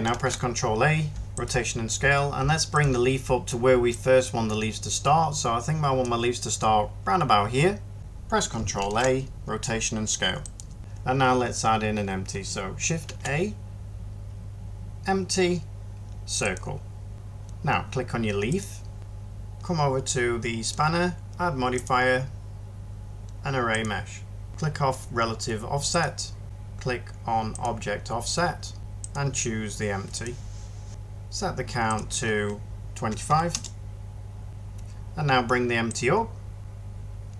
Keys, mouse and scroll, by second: 0.0 ctrl+a, 8.7 ctrl+a, 12.9 a, 33.0 typing, 33.4 Return, 34.5 ctrl+z.